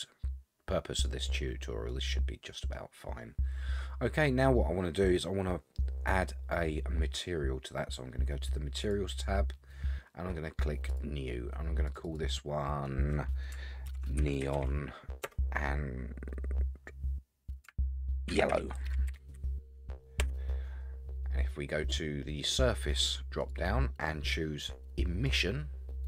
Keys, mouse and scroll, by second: 1.4-1.9 scroll down 2, 1.9-2.7 middle drag, 3.0-4.4 scroll down 7, 4.4-5.2 middle drag, 8.8 click, 10.9 click, 12.0-20.8 drag, 18.8 l, 23.4-25.4 drag.